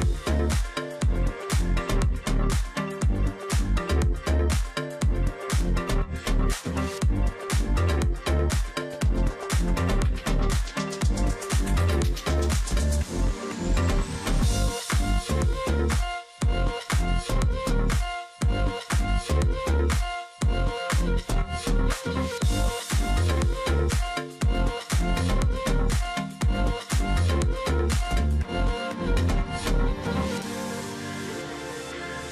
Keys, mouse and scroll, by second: 2.3 alt+click, 3.3 ctrl+click, 3.4 space, 4.4 space, 6.8 ctrl+click, 7.4 alt+scroll down 1, 7.7 space, 8.8-9.3 alt+scroll down 1, 9.3 alt+scroll up 1, 10.4 space, 11.2-11.7 alt+scroll down 1, 11.7 ctrl+click, 11.9 alt+scroll up 1, 12.0 space, 12.6 ctrl+click, 13.3-14.3 alt+scroll down 2, 13.5 ctrl+click, 14.4-14.9 alt+scroll down 1, 16.6-17.1 alt+scroll up 1, 17.1 ctrl+alt+click, 17.3 space, 18.5 ctrl+click, 18.7-19.4 alt+scroll down 1, 20.4 alt+scroll up 1, 20.6 space, 21.4 space, 23.0 ctrl+click, 23.0 ctrl+space, 25.0 ctrl+click, 25.1-25.6 alt+scroll down 1, 25.9 alt+scroll down 1, 26.1 space, 26.5-27.2 alt+scroll up 1, 27.3 space, 27.6-28.3 alt+scroll up 1, 28.3 alt+scroll, 28.4 space, 29.7 space, 31.7 alt+click, 31.9 ctrl+click, 32.1 ctrl+space.